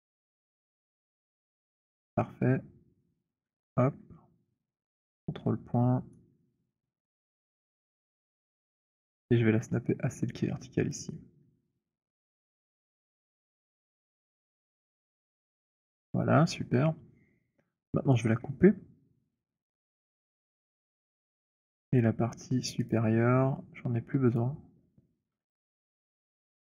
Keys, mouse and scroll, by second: 1.1 click, 3.6 click, 3.6 shift+right click, 6.1 right click, 8.3 click, 12.5-13.6 c, 14.1-14.6 c, 15.0 c, 15.4 middle click, 15.4 c, 19.6 click, 20.8 w, 22.8 click, 24.3 click, 25.2 Delete.